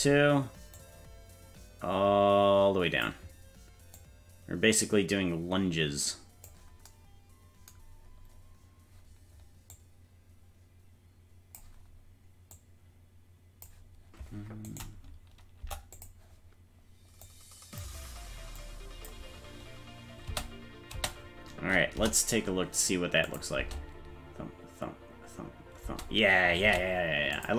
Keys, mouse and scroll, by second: 0.7-3.1 drag, 3.9-6.5 drag, 8.3-8.6 scroll down 2, 9.0-9.7 scroll down 1, 9.7-11.6 drag, 12.5-13.6 drag, 14.6 right click, 15.6 Delete, 17.2 click, 18.5 click, 20.2 space, 20.9 space, 21.9 KP_0, 23.2 click, 23.6 space, 25.8 space, 26.8 ctrl+s, 27.3 click.